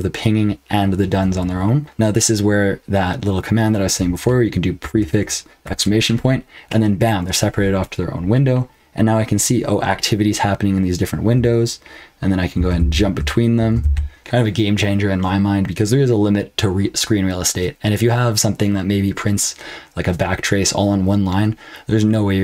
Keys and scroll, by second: 4.8 ctrl+b, 5.6 !, 12.5 ctrl+b, 12.7 n, 13.5 ctrl+b, 13.8 n.